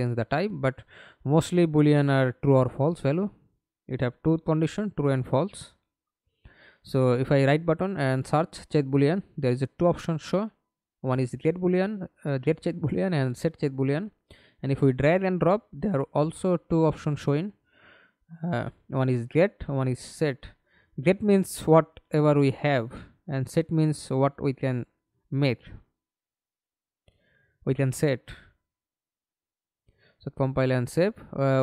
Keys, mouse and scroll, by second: 1.0 right click, 3.8-7.0 typing, 18.5-19.5 scroll up 3, 19.5-20.5 scroll up 2, 25.5 double click.